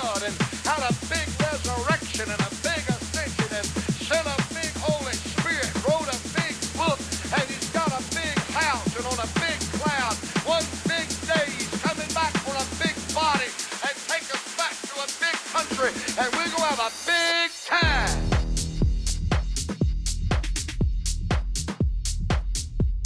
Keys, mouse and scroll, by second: 0.6 a, 1.1 a, 3.3 shift+a, 8.8 KP_1, 13.5 F6, 21.7 r.